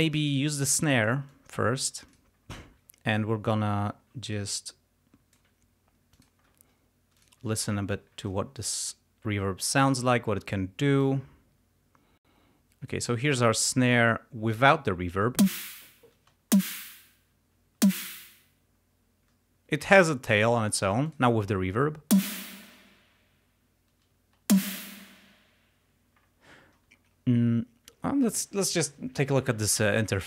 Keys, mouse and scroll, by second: 1.4 click, 1.4-1.8 scroll up 2, 1.5 click, 1.8 click, 2.2 click, 3.0 ctrl+scroll up 2, 3.5 ctrl+click, 3.6-4.1 ctrl+scroll up 3, 4.5 ctrl+click, 4.7-5.6 scroll up 1, 6.2 click, 7.2 click, 7.6 ctrl+scroll down 2, 7.9 ctrl+scroll up 2, 8.9 click, 9.8 click, 11.1-13.1 drag, 14.5 click, 15.5 space, 16.2 space, 17.3 space, 21.0 click, 22.2 space, 24.1 space.